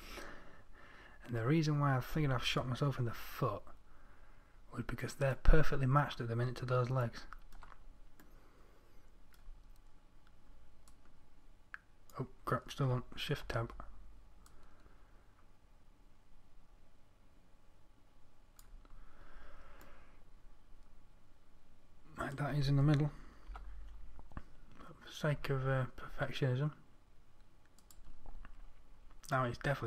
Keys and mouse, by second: 3.6 z, 11.3-12.5 drag, 13.9 shift+Tab, 19.8-22.2 middle drag, 23.9 g, 28.7-29.8 middle drag.